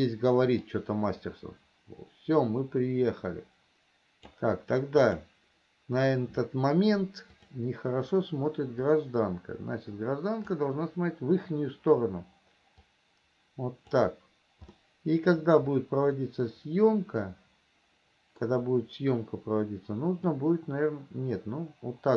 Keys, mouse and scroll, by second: 1.1-4.8 drag, 5.4 click, 7.5 click, 9.2-10.9 drag, 13.2-14.3 drag, 15.1-18.8 middle drag, 20.6-22.1 drag.